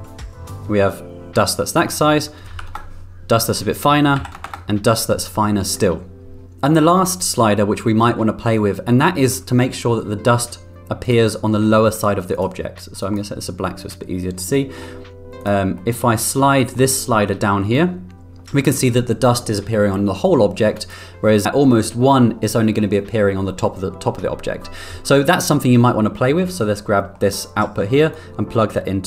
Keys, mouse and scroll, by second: 1.6-5.1 drag, 11.0 click, 11.7 middle click, 12.3 drag, 14.4 middle click, 15.8 middle click, 16.5 middle drag, 17.7 click, 25.6 middle click, 26.1 middle drag, 27.0 middle click, 28.1-29.0 drag.